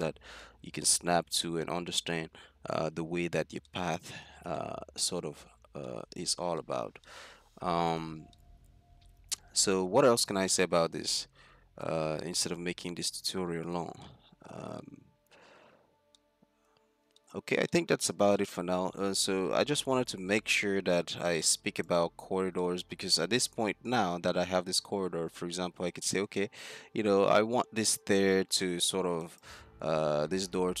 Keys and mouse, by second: 0.4-2.3 middle drag, 3.0 z, 4.1 z, 4.7 click, 4.9-6.8 middle drag, 8.2-9.6 middle drag, 10.3-10.7 middle drag, 10.9 middle drag, 11.3 middle click, 13.3-14.5 middle drag, 17.9-18.7 middle drag, 19.1 middle click, 19.6 middle drag, 22.0 right click, 22.1 z, 23.4 z, 24.9 z, 28.0 click, 30.0 z, 30.4-30.8 middle drag.